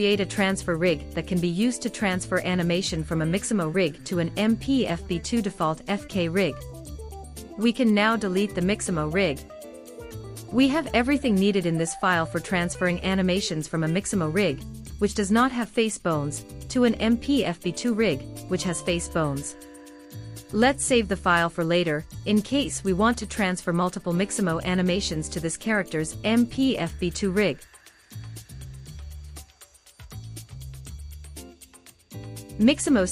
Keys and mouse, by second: 9.5 x, 22.7-24.5 drag.